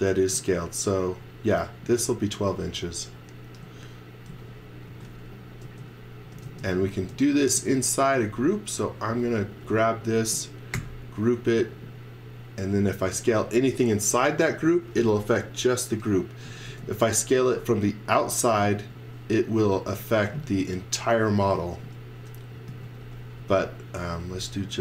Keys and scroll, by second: 0.3 space, 2.6 x, 3.6 z, 4.9 x, 5.3 v, 5.6 space, 6.5 space, 7.6 z, 8.0 space, 9.0 space, 10.7 g, 12.9 z, 16.7 space, 17.4 z, 18.9 x, 19.8 x, 22.4-24.0 typing.